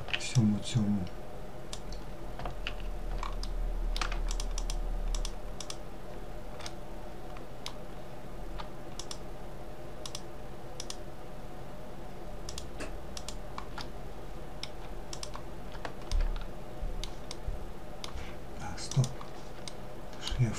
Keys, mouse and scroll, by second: 2.6-3.4 middle drag, 3.4 shift+drag, 3.7 shift+click, 4.3 shift+click, 4.7 shift+click, 5.8-7.1 middle drag, 7.1-8.2 scroll up 3, 8.2 shift+click, 9.2 shift+click, 9.9 shift+click, 11.6 shift+click, 12.3 shift+click, 13.0-14.3 middle drag, 14.3 shift+click, 15.3-18.1 middle drag, 18.1 click, 18.9-20.2 shift+middle drag, 20.2 shift+click.